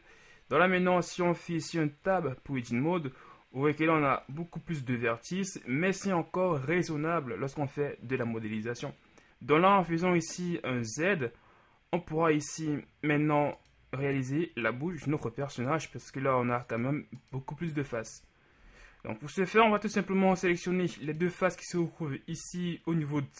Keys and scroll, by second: 2.2 Tab, 9.9 z, 15.1 z, 17.9 z.